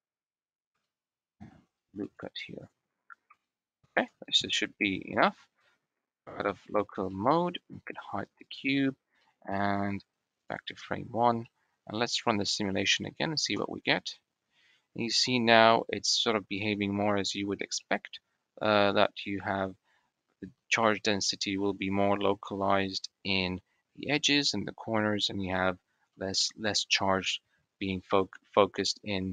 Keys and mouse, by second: 0.6 shift+click, 1.3 ctrl+r, 3.2 shift+click, 3.8 Tab, 4.1-4.9 drag, 5.1 shift+drag, 6.1 /, 6.9 click, 8.3 click, 9.1 click, 10.3 click, 11.3 click, 11.4 middle click, 12.2 middle click, 12.8 middle click, 13.4 space, 17.9-20.0 middle drag, 20.0-20.4 drag, 20.4-20.9 middle drag, 20.9-22.4 drag, 22.4-24.1 middle drag, 22.4 space, 24.1-24.6 drag, 24.6 middle click, 25.3-25.8 middle drag, 26.4 shift+middle click, 26.8-27.2 middle drag, 27.7 middle click, 29.0 middle click.